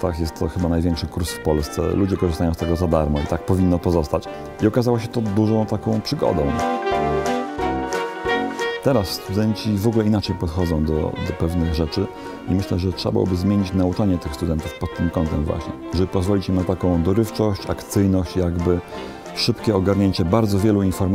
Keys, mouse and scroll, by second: 6.2 shift+d, 6.4-7.4 drag, 6.6 shift+d, 6.9 middle click, 7.6 right click, 8.3 KP_1, 9.4 middle click.